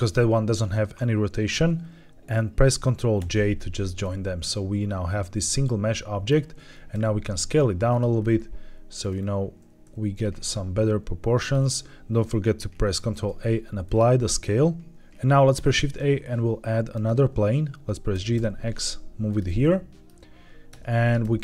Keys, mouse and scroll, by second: 3.1 ctrl+j, 3.9-6.2 middle drag, 6.8 s, 7.8 click, 8.1-8.8 scroll down 3, 8.8-9.7 scroll up 4, 9.7 s, 11.3 click, 12.9 ctrl+a, 14.9 scroll up 1, 15.5 shift+a, 18.0 g, 18.3 x, 19.2 click, 19.5-20.0 shift+middle drag, 20.6 Tab, 21.1 s.